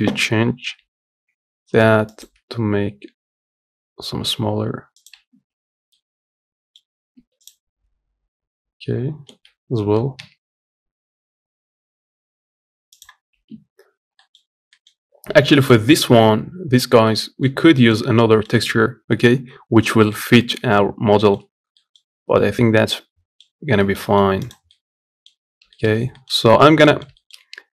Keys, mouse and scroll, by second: 5.4 scroll down 1, 5.7-6.7 middle drag, 6.7 scroll up 2, 6.9 Tab, 13.6 scroll down 1, 13.9 middle click, 14.2 scroll up 3, 14.4 middle click, 14.7-15.3 scroll down 1, 15.3 middle click, 15.7-16.8 scroll up 2, 16.8 middle click, 17.3-18.0 scroll down 3, 17.5 middle click, 18.0 middle click, 18.2-19.6 scroll up 1, 19.6-19.9 scroll up 1, 19.9 shift+middle click, 20.7-21.0 scroll down 1, 21.0 shift+middle click, 21.3 scroll up 1, 21.5-22.2 scroll down 2, 21.5 middle click, 22.2-23.2 middle drag, 23.2-23.5 scroll up 1, 23.5 shift+middle click, 24.1 click, 24.4 middle click, 25.2 scroll down 1, 25.5 shift+middle click, 25.7 scroll up 1, 25.9 shift+middle click, 26.2-26.6 scroll up 2, 26.6 middle click, 27.1-27.7 scroll down 2.